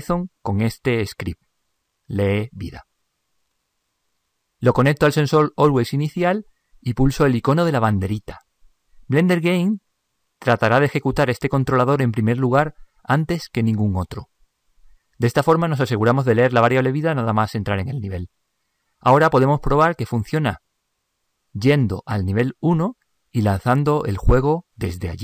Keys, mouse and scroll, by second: 2.5-7.1 drag, 7.3-17.4 drag, 21.7-22.8 drag, 25.1 p.